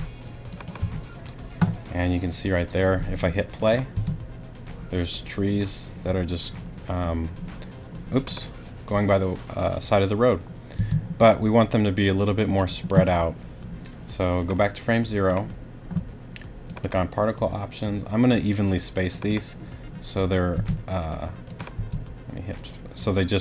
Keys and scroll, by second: 3.9 space, 10.8 space, 20.5 space, 21.8 space.